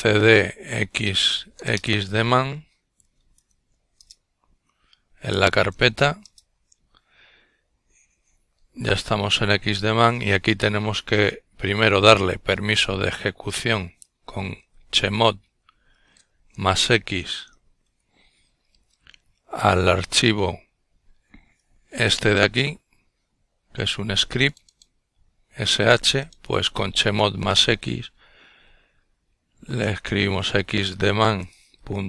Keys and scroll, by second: 0.0-0.4 typing, 0.6 Return, 2.0-3.3 typing, 9.0-11.9 typing, 13.7-14.3 typing, 25.5-29.4 typing, 30.6-31.3 typing.